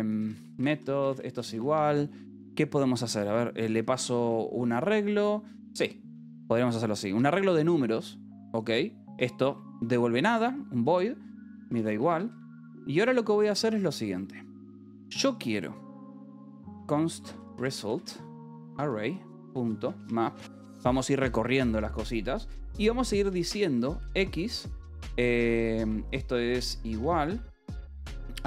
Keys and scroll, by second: 0.0-4.6 typing, 7.7 ctrl+g, 8.3 Escape, 8.7 j, 9.0 a, 9.4 Return, 10.4 =, 10.8 Return, 11.9 Escape, 12.2 k, 12.4 a, 12.5 BackSpace, 12.9 space, 16.1-20.7 typing, 23.7-25.7 typing, 26.8 BackSpace, 27.1 space, 28.4 x.